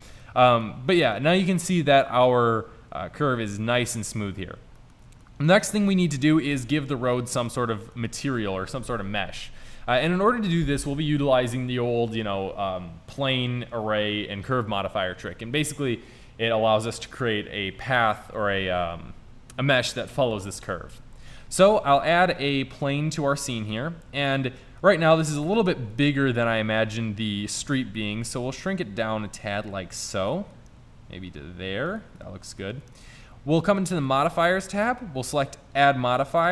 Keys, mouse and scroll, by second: 3.2-4.4 middle drag, 21.3 shift+a, 23.0 shift+a, 28.3 s, 30.8 s, 32.3-33.3 middle drag.